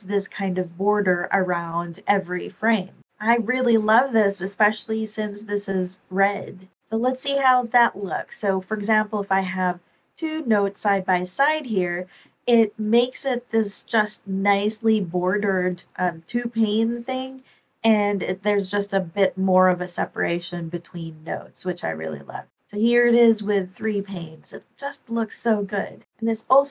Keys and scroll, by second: 7.2 ⟲, 26.1 ctrl+super+l, 26.3 ctrl+super+r.